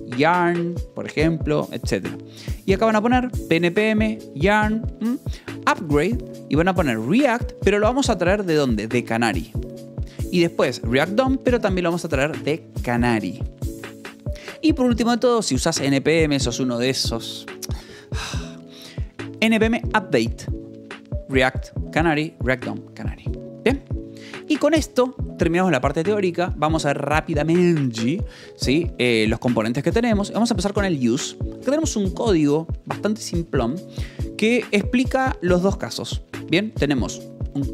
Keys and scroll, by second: 1.9 j, 2.9 shift+v, 6.2 Escape, 6.9 v, 7.5 e, 8.7 l, 10.0 Escape, 10.1 l, 10.7 v, 11.2 e, 13.7 Escape, 14.3 j, 14.9 k, 16.1 j, 17.5 shift+v, 18.9 Escape, 23.7 k, 24.2 k, 24.5 j, 26.3-30.2 typing, 28.1 Return, 29.1 Return, 30.3 Return, 32.8 j, 33.7 shift+v, 34.0 Escape, 37.4 shift+v.